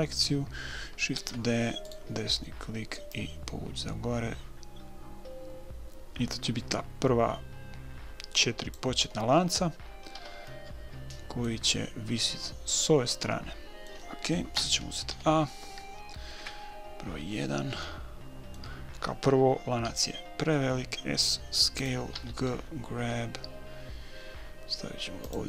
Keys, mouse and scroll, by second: 0.1 a, 1.5 shift+d, 3.5-5.5 drag, 9.5 middle click, 10.6 a, 10.9-12.7 middle drag, 13.6 middle click, 13.9-15.3 drag, 15.5 a, 16.7 KP_1, 18.2 middle click, 20.2 s, 22.5 g.